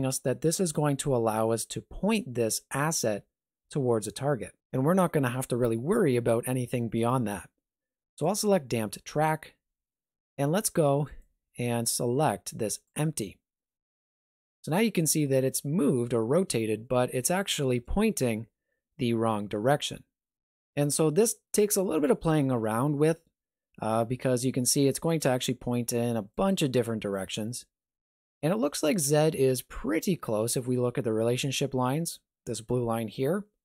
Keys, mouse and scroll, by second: 11.1 click, 15.2-16.1 scroll down 2, 16.1 middle click, 17.2 shift+middle click, 21.6 middle click, 22.3 shift+middle click, 25.1 click, 26.3 click, 27.1 click, 29.1 middle click.